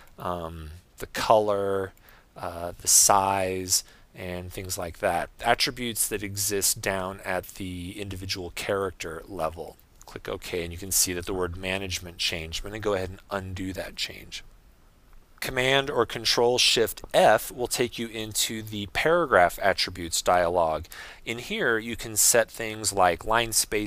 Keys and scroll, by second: 18.3 shift+super+f.